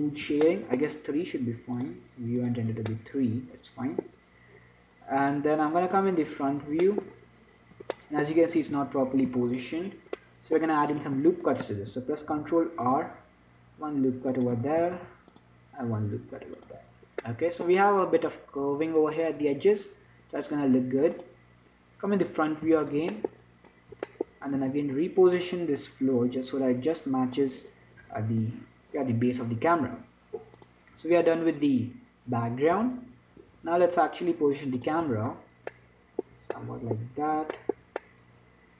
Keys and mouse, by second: 0.5 t, 1.4 middle click, 2.1-4.8 drag, 4.8 middle click, 6.3-9.0 drag, 9.0 z, 9.6 z, 11.5 Tab, 12.6 ctrl+r, 15.1 ctrl+r, 17.0 Tab, 20.1-21.4 middle drag, 22.4 click, 22.9 z, 24.9 z, 26.1-27.8 drag, 31.6-37.0 drag, 33.1 n, 35.4 n, 38.3-38.7 middle drag.